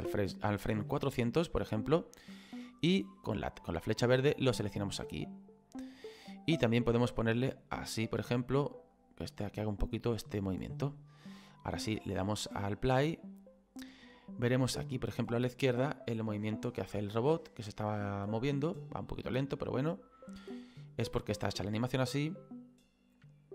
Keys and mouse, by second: 1.0 middle click, 3.8 click, 7.1 click, 9.0 click, 10.1 click, 12.0 space, 13.9 middle click.